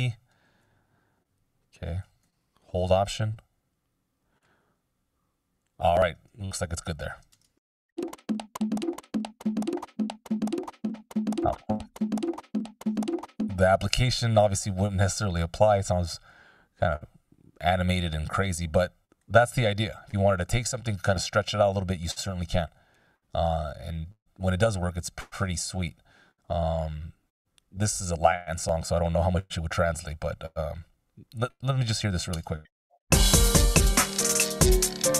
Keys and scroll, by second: 0.4 super+z, 7.4 shift+space, 12.9 space, 14.6 super+z, 19.4 F16, 32.6 space.